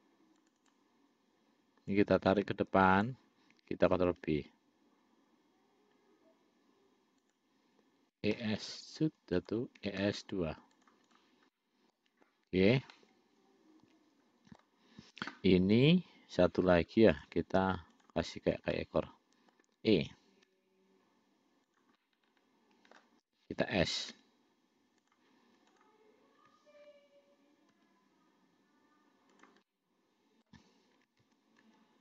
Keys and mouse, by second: 2.2-3.4 drag, 4.3 ctrl+b, 8.4 e, 10.1 e, 11.4 click, 11.8 middle click, 13.2-15.0 middle drag, 16.7 click, 17.4 click, 19.0 middle click, 20.7 e, 22.2-23.3 middle drag, 24.4 s, 26.0 click, 28.0 s, 29.9 click, 31.5 ctrl+z, 31.9 ctrl+z.